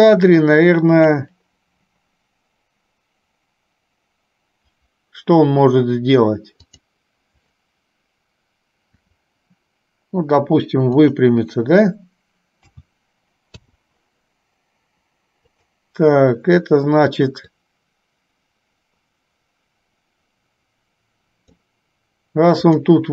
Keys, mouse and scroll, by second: 6.9 click, 9.2 r, 12.8 a, 15.7 click, 17.8-21.8 drag, 22.9 click.